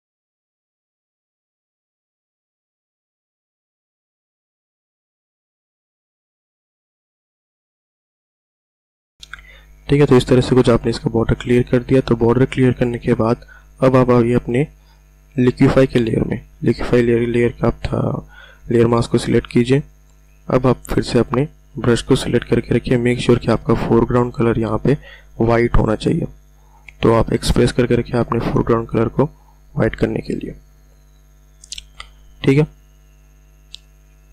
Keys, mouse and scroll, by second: 1.5 [, 2.0 click, 7.9 click, 9.2-9.9 ctrl+alt+scroll down 1, 10.7-11.0 ctrl+alt+scroll up 1, 25.7 x, 32.9-33.5 ctrl+alt+scroll down 1, 33.5-34.0 ctrl+alt+scroll down 1, 34.0-34.3 ctrl+alt+scroll down 1.